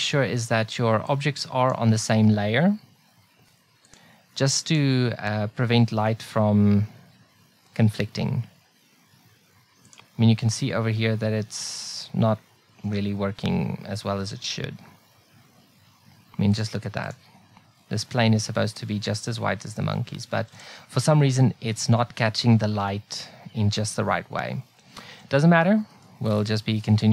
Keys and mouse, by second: 9.9-15.8 drag, 16.6 click.